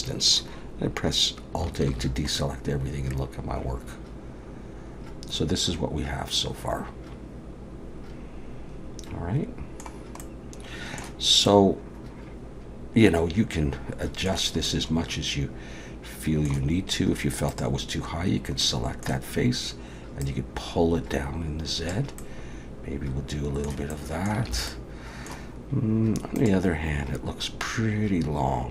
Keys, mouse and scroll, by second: 1.9 alt+a, 2.3 middle click, 10.2 middle click, 11.5 middle click, 14.7 middle click, 17.5 click, 18.6 middle click, 20.2 click, 22.2 middle click, 23.9 middle click, 24.5 alt+a, 24.7 middle click.